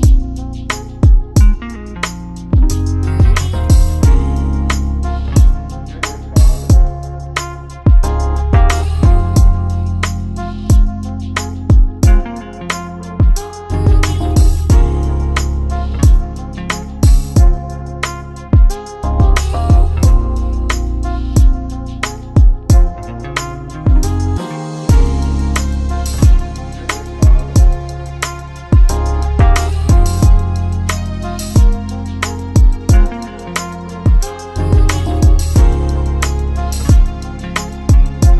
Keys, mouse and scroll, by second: 0.3 click, 3.3 click, 4.9 click, 5.9 click, 6.9 click, 8.5 click, 12.6 click, 15.6 click, 16.7 ctrl+c, 17.9 ctrl+c, 20.0 ctrl+v, 21.4 click, 28.6 right click, 30.1 click, 30.9 click, 33.1 ctrl+v, 35.1 click, 36.8 ctrl+v.